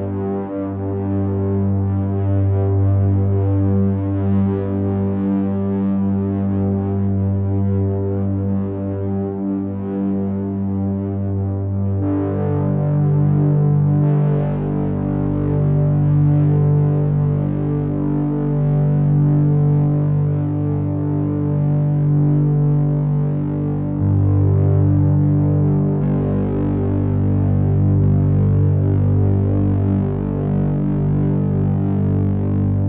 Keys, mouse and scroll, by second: 0.9 click, 5.0 click, 6.0-7.8 scroll up 5, 7.8 click, 15.4 click, 17.1 click, 21.7 click, 23.1 click, 31.3-32.0 scroll down 6, 32.0-32.8 scroll up 1.